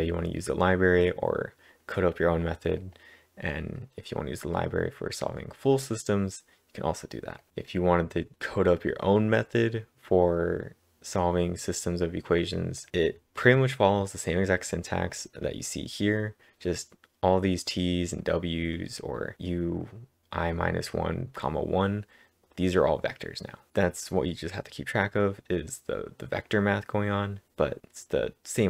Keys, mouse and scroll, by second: 2.8 click, 3.2-4.1 scroll down 4, 4.1-5.0 scroll down 1, 7.4 click, 7.4-8.3 scroll down 1, 12.8 click, 12.8 scroll down 1, 12.9-13.4 scroll up 1, 15.0 click, 15.5-16.0 scroll up 3, 16.0-17.0 scroll down 2, 17.3 click, 18.2 click, 18.8-20.2 scroll up 3, 23.7-24.5 scroll down 2, 24.5 click, 25.7 click.